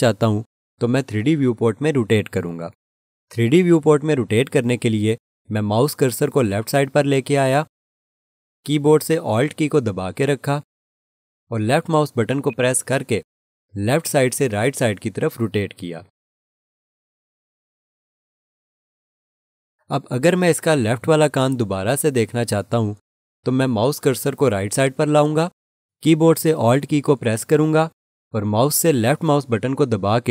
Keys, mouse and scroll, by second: 12.4 alt+click, 29.5 alt+click.